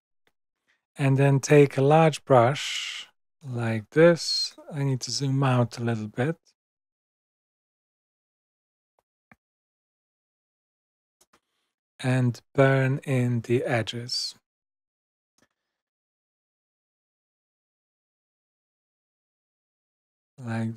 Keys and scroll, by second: 4.4 super+-, 8.3 super+].